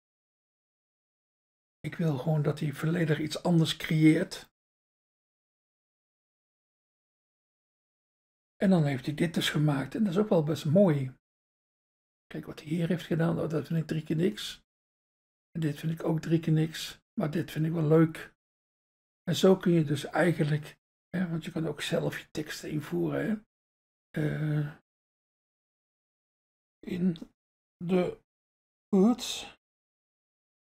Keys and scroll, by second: 1.1 Return, 26.6-29.9 typing.